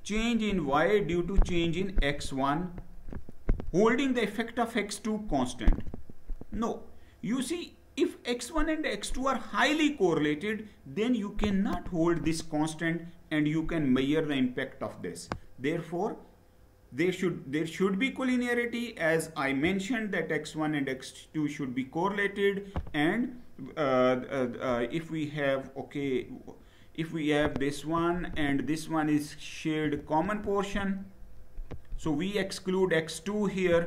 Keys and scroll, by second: 25.8 Down.